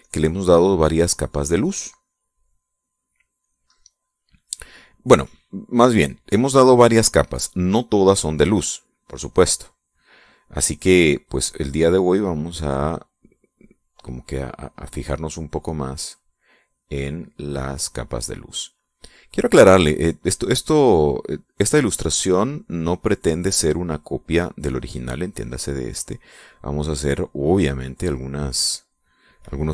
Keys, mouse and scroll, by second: 0.0 click, 0.4 click, 1.3-3.7 drag, 3.8 click, 4.1 click, 9.4-10.5 drag, 11.0 middle click, 14.4-15.6 drag, 15.8 click, 17.0-19.2 drag, 20.5-24.9 drag, 26.7-28.3 drag.